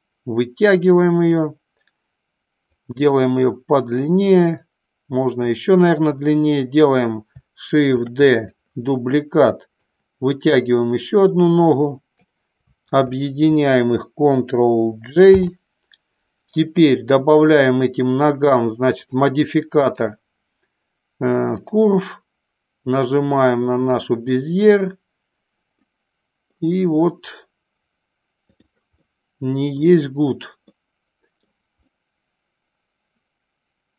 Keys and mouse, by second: 2.7 click, 4.5 click, 8.0 shift+d, 8.2 click, 9.7-12.1 drag, 12.9 shift+click, 15.2 ctrl+j, 19.9-21.7 drag, 22.7 click, 25.7 middle click, 28.9-29.7 middle drag, 30.7-31.3 middle drag, 31.8-33.9 middle drag.